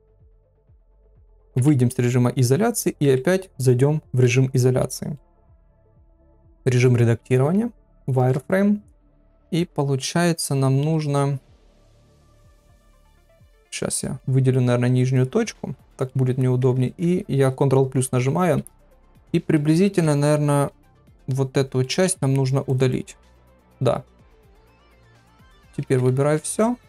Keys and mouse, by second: 1.5 KP_Divide, 3.0 KP_Divide, 4.8 Tab, 5.1 middle click, 7.0 z, 8.1 shift+middle click, 9.6 KP_1, 12.6 click, 14.1 middle click, 15.1 click, 15.8 middle click, 16.6 ctrl+KP_Add, 16.8 ctrl+KP_Add, 18.0 ctrl+KP_Add, 19.3 middle click, 20.0 ctrl+KP_Add, 20.9-21.9 middle drag, 22.0 x, 24.1 z, 25.0 middle click, 25.8 a, 26.3 alt+e.